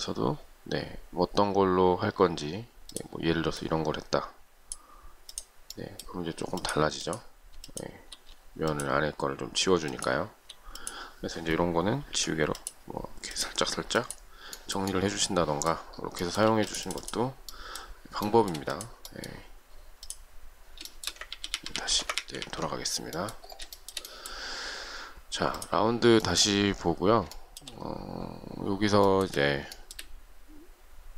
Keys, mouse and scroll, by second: 7.8 shift+click, 10.0 shift+click, 12.3 e, 16.7 space, 18.5 shift+middle click, 21.1 shift+middle click, 21.5 ctrl+z, 23.2 ctrl+z, 24.0 shift+middle click, 27.5 shift+middle click, 29.2 shift+middle click.